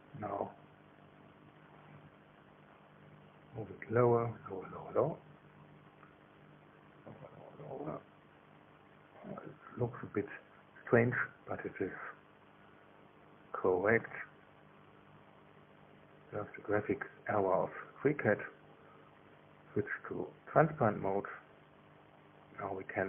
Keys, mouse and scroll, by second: 1.2-3.1 shift+middle drag, 3.1 click, 6.1 click, 10.5-17.6 middle drag, 17.0 KP_1, 19.4 click, 21.5 click.